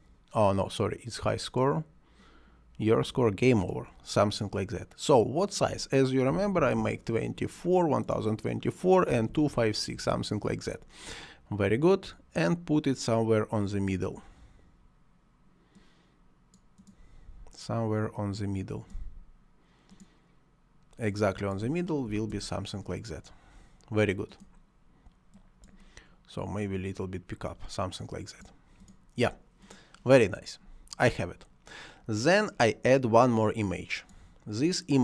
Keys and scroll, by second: 6.3 1, 6.4 0, 6.6 2, 6.8 4, 9.2 2, 9.4 5, 9.6 6, 10.0 Return, 22.1 2, 22.3 Return.